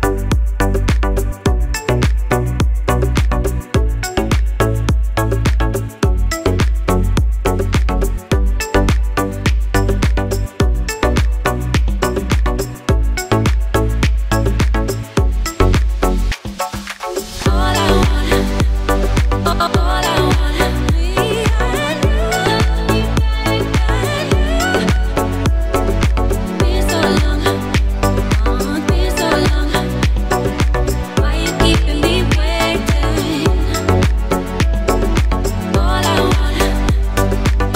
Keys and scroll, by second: 8.3 KP_1, 8.5 KP_6, 9.1 Return, 17.3 Tab, 18.9 a, 19.7 s, 22.5 s, 27.7 g, 28.2 z, 36.8 g, 37.3 z.